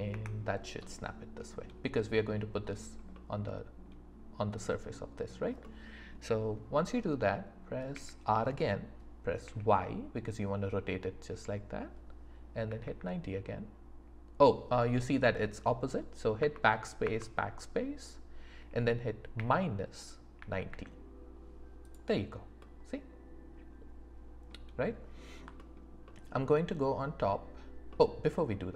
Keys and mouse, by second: 0.1 Return, 0.8 click, 3.1 click, 3.1 right click, 3.7 middle click, 5.6 click, 5.6 right click, 7.9 r, 9.4 y, 12.6 KP_9, 16.4 BackSpace, 19.3 KP_Subtract, 21.8 click, 22.6-24.5 middle drag, 25.5 alt+middle click, 27.9-28.5 middle drag.